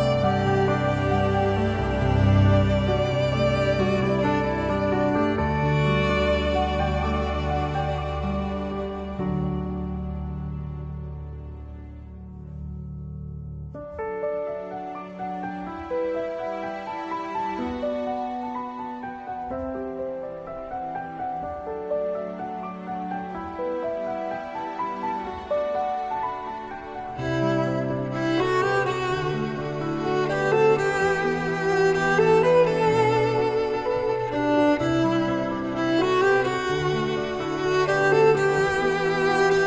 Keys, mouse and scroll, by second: 2.6 scroll down 1, 2.9 middle click, 4.4 space, 6.6 middle click, 6.8-8.4 typing, 7.3 scroll up 1, 11.4 shift+middle click, 11.5 Tab, 12.1 g, 12.2 x, 12.5 Tab, 13.8 Tab, 17.8 s, 18.1 g, 18.5-18.9 scroll up 2, 20.4 space, 21.7 space, 23.7 ctrl+click, 24.1 middle click, 24.8 alt+d, 25.5 g, 26.3 r, 34.6-36.7 typing, 34.7 ctrl+z, 34.9 shift+Right, 35.2 Escape, 35.4 shift+Left, 36.4 Return.